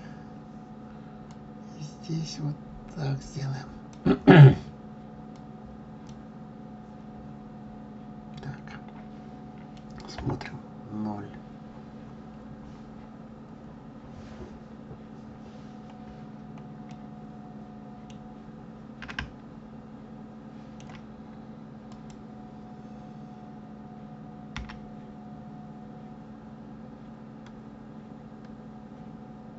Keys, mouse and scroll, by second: 1.8 click, 6.2 click, 7.4-7.7 scroll down 4, 8.4 scroll up 2, 10.3 KP_0, 11.4-14.3 scroll down 27, 14.5-14.9 scroll up 3, 15.1 scroll down 2, 16.4 scroll up 1, 17.2-18.5 middle drag, 18.5-18.8 scroll down 2, 19.4-22.0 middle drag, 22.0 click, 24.7 g.